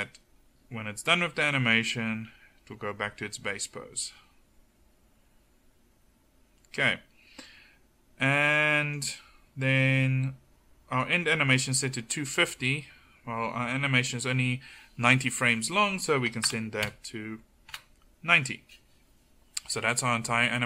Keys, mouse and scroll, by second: 11.7-20.6 drag.